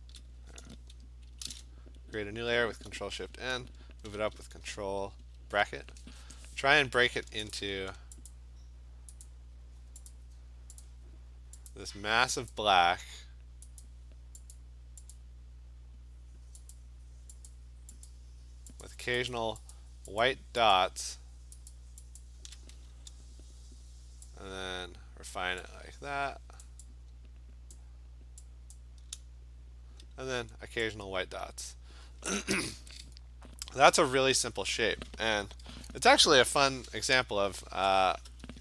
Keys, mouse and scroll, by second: 1.3 ctrl+shift+n, 2.7 Return, 4.1 ctrl+], 4.4 ctrl+], 7.6 click, 8.3 shift+click, 9.3 click, 10.1 click, 10.8 shift+click, 11.7 shift+click, 12.5 shift+click, 13.8 shift+click, 14.6 shift+click, 15.2 shift+click, 16.8 shift+click, 17.5 shift+click, 18.1 shift+click, 18.9 shift+click, 19.3 shift+click, 19.8 shift+click, 20.2 shift+click, 20.8 shift+click, 21.7 shift+click, 22.2 shift+click, 25.3 click, 26.7 click, 27.8 click, 28.8 click, 31.7 click, 32.5-34.4 scroll, 36.4-38.2 scroll.